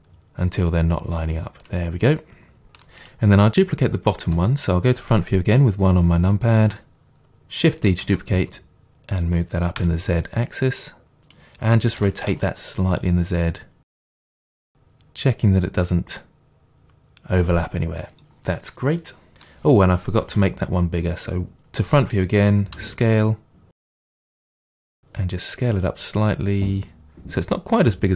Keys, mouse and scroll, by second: 3.0 click, 4.3 KP_1, 6.8-23.8 shift+middle drag, 8.1 shift+d, 11.3 click, 12.0 r, 14.0 click, 20.3 KP_1, 22.8 s, 23.8 right click, 24.1 s.